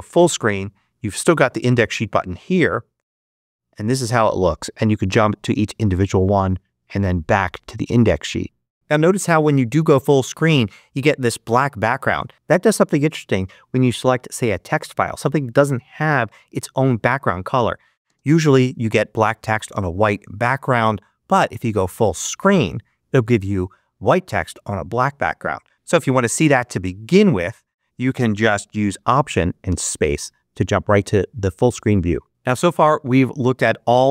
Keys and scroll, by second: 18.0 space, 25.7 Escape, 27.0 Escape, 29.6 alt+space.